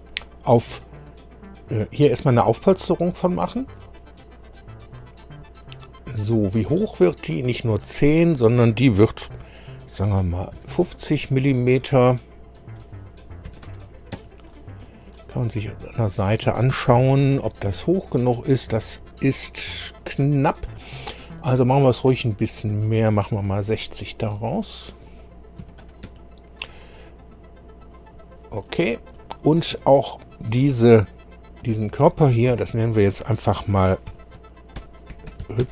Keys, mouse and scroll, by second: 3.4 click, 4.4 click, 6.1-6.5 scroll up 2, 6.7-8.4 middle drag, 10.6 KP_5, 10.7 KP_0, 12.6 click, 13.5 KP_5, 13.7 KP_0, 14.2 Tab, 15.0-16.2 middle drag, 16.9 KP_1, 17.8-18.3 scroll up 2, 19.7 scroll up 2, 22.6 click, 24.6 click, 25.6 KP_6, 25.8 KP_0, 26.0 Tab, 27.8 click, 28.6 middle click, 29.4-29.8 scroll down 1, 31.6 click, 32.5 F2, 34.1-35.7 typing.